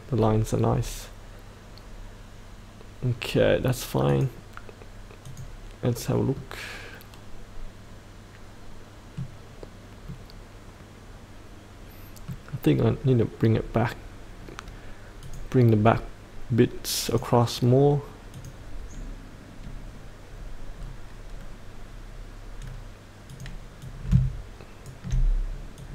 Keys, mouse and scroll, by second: 4.1 click, 5.9-6.3 scroll down 1, 6.3 middle click, 6.6-9.4 middle drag, 9.4-10.1 scroll up 1, 10.1-12.7 middle drag, 15.2 click, 20.7-22.1 scroll down 1, 22.1-23.4 scroll up 1, 23.4-24.9 drag, 25.8-25.9 drag.